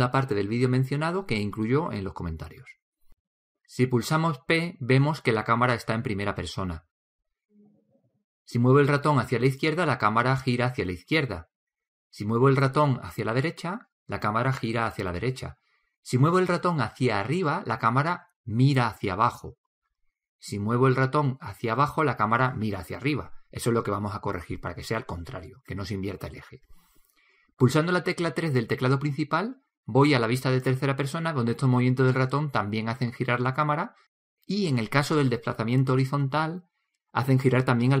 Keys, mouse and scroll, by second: 5.0 p.